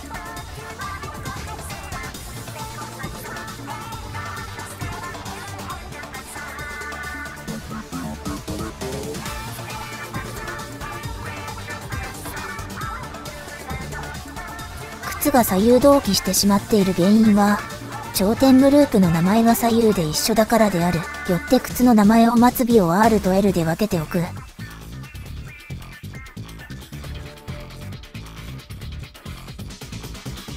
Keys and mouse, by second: 0.1-1.4 drag, 2.3 click, 3.5-4.9 drag, 5.9 click, 6.4 click, 7.2 click, 9.3-10.9 drag, 12.1 middle click, 13.6-15.8 drag, 16.2 ctrl+z, 16.8 click, 18.4 shift+click, 21.5 Tab, 23.0 click, 24.0 click.